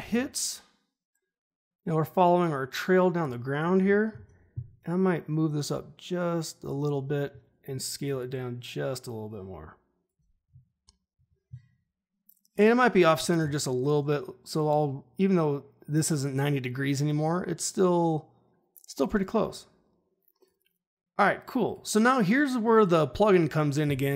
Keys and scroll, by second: 4.1 ctrl+shift+h, 13.3 r.